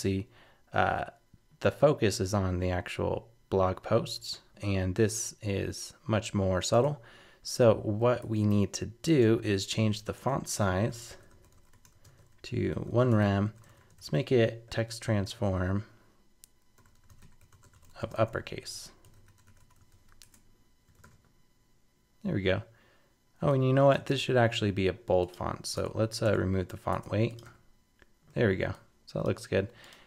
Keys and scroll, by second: 14.6 super+BackSpace, 19.9 super+s, 20.2 super+Tab, 21.0 super+r, 24.1 super+Tab, 25.8 super+BackSpace, 26.7 super+s, 26.9 super+Tab, 27.4 super+r.